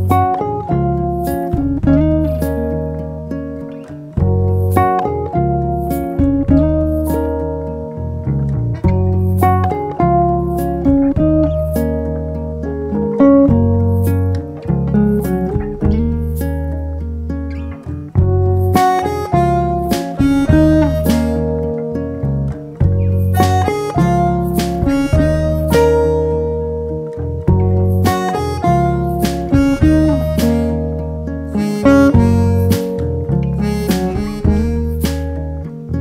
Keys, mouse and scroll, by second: 2.1 click, 2.8 e, 5.6 click, 6.2 r, 9.5 click, 9.8 KP_7, 10.4 click, 11.3 r, 14.1 click, 15.1 click, 16.0 r, 19.3 click, 21.3 KP_1, 22.7 r, 26.1 click, 28.9 click, 29.8-31.7 drag, 34.3-35.4 alt+s, 35.3 alt+click.